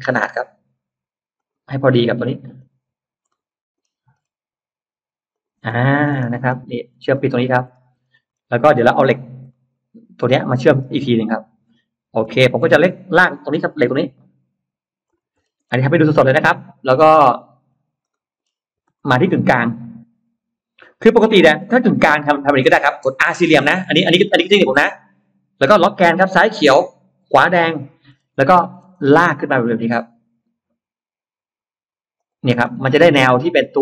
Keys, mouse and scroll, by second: 1.2 click, 2.4 click, 3.1 middle click, 3.1-3.5 scroll up 1, 4.1-4.8 scroll up 2, 5.2 click, 5.5-6.5 scroll down 2, 6.1 space, 6.1 middle click, 6.7 Escape, 7.0 middle click, 7.2-8.1 scroll down 2, 8.1 scroll up 1, 8.8-9.1 scroll down 1, 9.3 middle click, 10.5-10.9 scroll up 1, 12.0-13.5 scroll up 3, 13.7 l, 14.9 click, 15.2-16.6 scroll down 3, 17.6 scroll up 2, 18.0 middle click, 18.2-18.5 scroll up 2, 18.8-19.1 scroll down 2, 19.9 Escape, 20.0 middle click, 21.0 middle click, 21.5 middle click, 21.9 space, 22.3 middle click, 26.4 Left, 27.3 Right, 27.6 click, 27.9 middle click, 27.9-28.7 scroll down 2, 28.4 middle click, 28.9 middle click, 32.0 click, 32.6 middle click, 32.6 space, 33.0 middle click, 33.5 click.